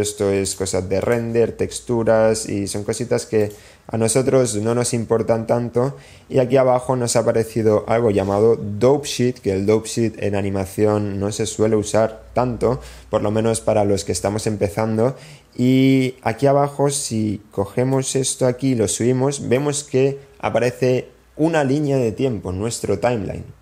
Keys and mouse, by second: 0.2 click, 0.9-2.3 drag, 2.6 click, 4.6 click, 18.1-20.0 drag.